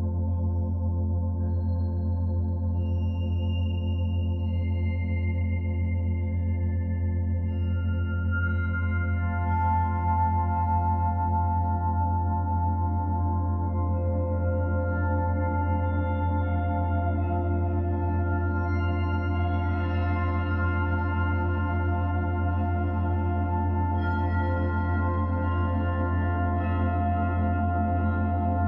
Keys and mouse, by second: 0.2 shift+d, 1.3 shift+click, 2.6 Right, 2.9 Right, 3.0 Right, 3.1 Right, 3.4 Right, 3.6 Right, 3.8 Right, 4.0 Right, 5.3 Down, 6.7 s, 7.7-9.3 drag, 8.3 typing, 9.6 Right, 10.0 Right, 10.2 Right, 10.3 Right, 10.5 Right, 10.7 Right, 11.2 Right, 11.4 Right, 11.5 Right, 11.8 Right, 12.1 Right, 12.2 Right, 12.3 Right, 14.0-15.3 drag, 15.3 shift+d, 16.3-17.5 shift+drag, 17.6 g, 17.9-19.1 drag, 18.7 space, 19.8 space, 20.1 click, 20.5 space, 21.8 space, 22.1 click, 22.5 space, 24.2 space, 24.9-28.6 drag.